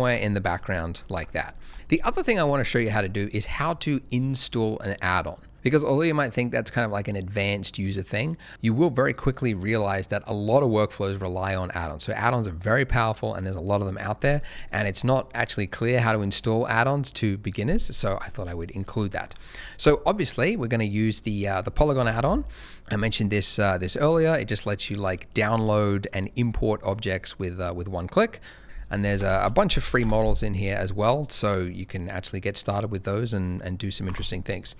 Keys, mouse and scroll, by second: 0.0 middle click, 0.0 shift+g, 0.0 shift+middle click, 0.4 click, 1.0 shift+middle click, 1.2-1.5 shift+scroll down 1, 1.7 alt+a, 1.7 click, 19.8 n, 21.2 middle click, 25.4 click, 28.6 click, 28.9 double click, 29.0-29.4 typing, 30.0 Return, 32.6 middle click.